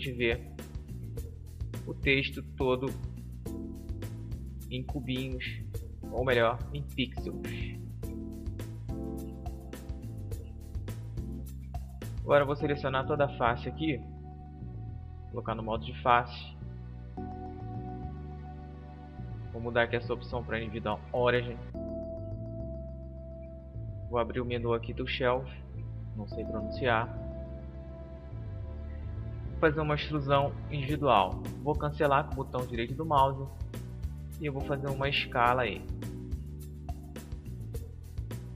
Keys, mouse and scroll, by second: 0.4 middle click, 0.9 middle click, 3.8 z, 5.2 middle click, 10.1 Tab, 12.3 a, 12.5 a, 12.9 a, 14.8-15.9 drag, 16.4 click, 16.6 click, 18.5-20.5 drag, 23.0 t, 25.7-27.6 drag, 29.8-31.8 drag, 31.8-33.8 middle drag, 34.4 s.